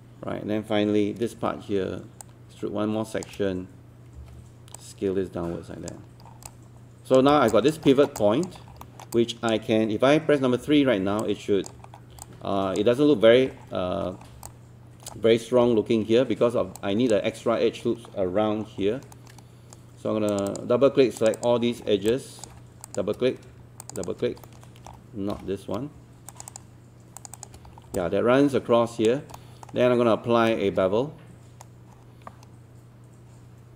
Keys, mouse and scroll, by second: 2.2 shift+click, 4.8 click, 6.3 alt+scroll down 1, 6.5 alt+click, 7.3 scroll down 1, 7.5 alt+click, 7.9 alt+middle click, 8.2 alt+click, 8.6 scroll up 1, 8.9 alt+middle click, 9.1-10.5 alt+drag, 10.6 3, 11.2 alt+click, 11.9 scroll up 1, 12.2 alt+click, 13.5-14.1 scroll down 1, 14.1 scroll up 1, 14.5 alt+click, 16.8 alt+click, 18.7 scroll up 1, 19.1 right click, 20.3 click, 21.2 shift+click, 22.1 alt+click, 23.8 shift+click, 24.4 alt+middle click, 25.3 alt+z, 26.3 shift+click, 27.2 shift+click, 27.4 shift+click, 27.7 scroll down 1, 28.0 alt+click, 29.4 alt+middle click, 29.8-30.1 scroll up 1, 30.5-32.4 shift+right drag.